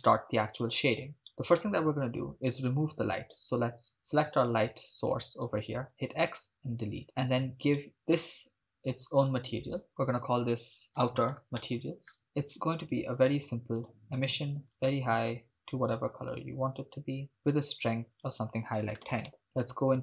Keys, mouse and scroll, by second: 1.3-3.8 right drag, 3.9-5.9 scroll down 4, 5.9-6.7 scroll down 1, 5.9 x, 6.7-7.0 scroll up 1, 7.0-7.8 scroll down 1, 7.8 right click, 8.6 click, 9.2 click, 9.9-11.6 drag, 12.2-13.1 scroll down 6, 13.8 click, 18.1-19.3 drag, 19.6 click.